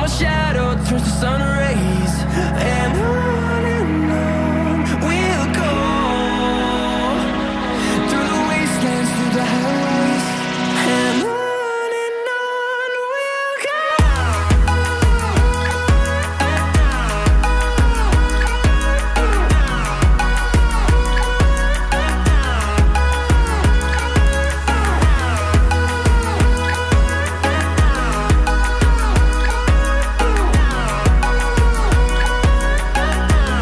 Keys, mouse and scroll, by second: 10.2 Escape, 21.4 Escape, 21.5 Escape, 25.3 Escape, 32.6 Escape.